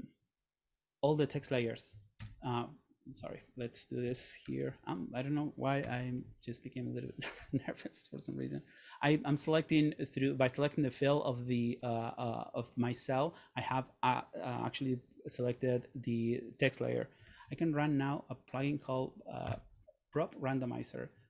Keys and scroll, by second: 1.2 Down, 2.4 Return, 3.3 Escape, 4.6 super+., 6.0 Return, 17.3 super+/, 18.8-21.2 typing.